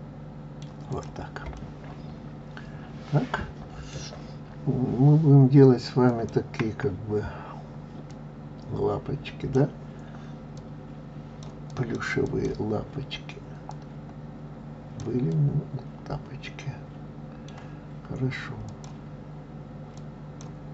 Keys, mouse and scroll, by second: 0.9 click, 1.5-4.4 middle drag, 4.4-5.2 scroll up 2, 6.1 click, 8.1 click, 10.6-11.9 drag, 12.2 click, 13.6 click, 15.3-18.3 middle drag, 18.7 click, 19.9 click.